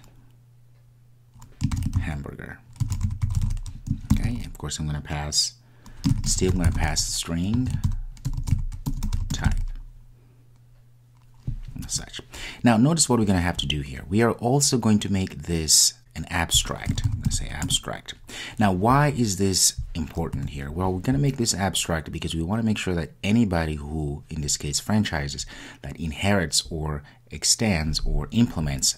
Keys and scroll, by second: 17.6 Return.